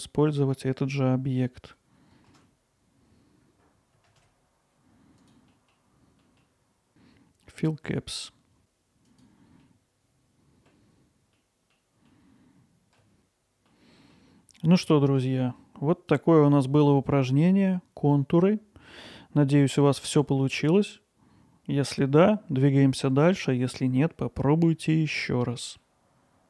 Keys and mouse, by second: 2.2 shift+d, 3.0 shift+z, 3.5 middle click, 3.8 middle click, 4.2-5.6 drag, 6.5 alt+middle click, 6.7 alt+middle click, 9.1 click, 9.6-10.7 alt+middle drag, 11.4-11.8 middle drag, 12.2-13.0 alt+middle drag, 13.7-14.2 middle drag, 15.3-16.1 drag, 18.3-20.8 middle drag, 25.3-25.8 middle drag.